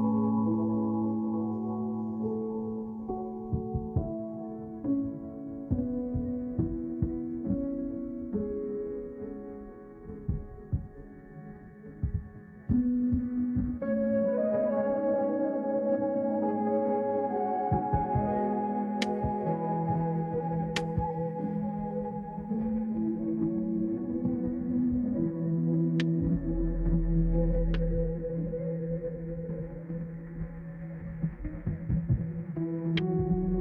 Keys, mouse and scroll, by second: 9.5 middle click, 10.3-10.7 scroll down 1, 15.4 middle click, 19.9 click, 21.2 2, 24.4 click, 24.9-25.9 typing, 27.3-28.2 typing, 28.8 click, 29.6 3, 30.5 click, 31.5 3.